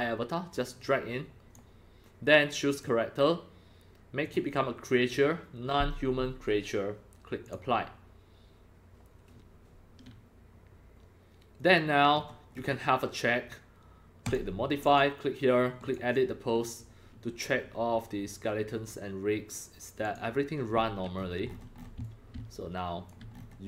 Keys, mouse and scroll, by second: 0.8 click, 2.7 click, 4.3 click, 7.4 click, 11.6 click, 12.1-13.7 scroll down 9, 14.2 click, 14.9 click, 15.8 click, 17.4 scroll down 1, 17.4 scroll up 1, 20.0 click, 20.4 click, 21.1-21.9 scroll up 16, 22.0-23.1 drag, 22.9 c, 23.3 scroll, 23.3 scroll up 1, 23.4 scroll.